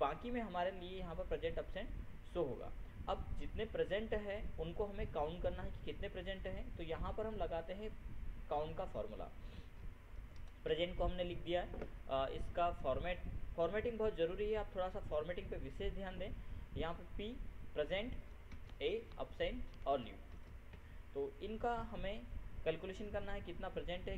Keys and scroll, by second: 10.7 ctrl+shift+p, 11.2 ctrl+Tab, 19.4 ctrl+Tab, 20.9 ctrl+shift+l, 21.2 ctrl+Tab.